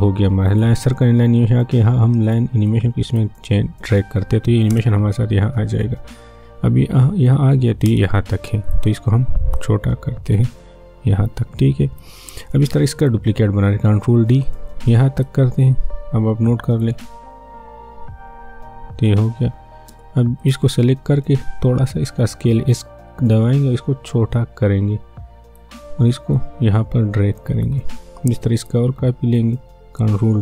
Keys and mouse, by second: 4.7 space, 7.9 space, 8.6-12.2 drag, 13.8 ctrl+d, 14.4-16.9 drag, 16.9 space, 19.9 space, 20.4 click, 22.6 s, 24.3-28.5 drag, 30.0 ctrl+d.